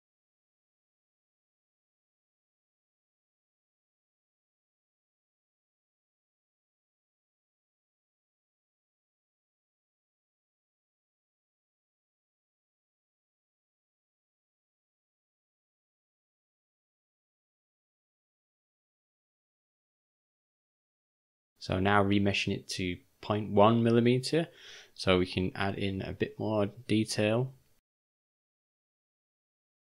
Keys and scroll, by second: 1.1-1.9 typing, 18.2 v, 19.8 ;.